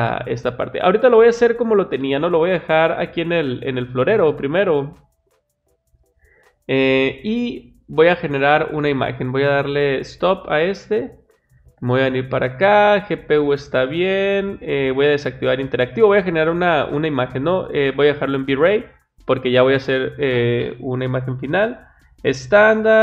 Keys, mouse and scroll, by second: 1.4 click, 3.9 click, 8.0 click, 9.1 click, 10.6 click, 11.6 click, 13.8 click, 15.0 click, 17.6 click.